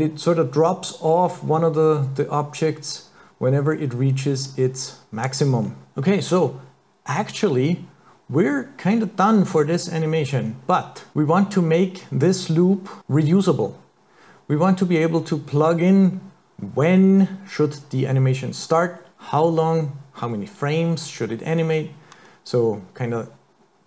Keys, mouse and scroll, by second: 4.5 click, 5.7 scroll down 4, 5.9 click, 10.4-10.8 scroll down 4, 11.1 scroll up 4.